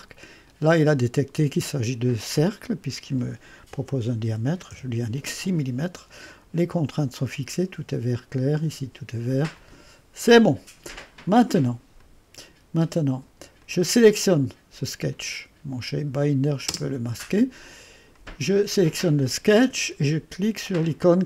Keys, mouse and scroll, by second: 0.0 click, 4.4 6, 4.7 Return, 6.4 typing, 9.6 click, 12.0 click, 12.9 space, 13.6 click, 16.2 click, 16.7 typing, 18.2 click, 18.6-21.2 drag.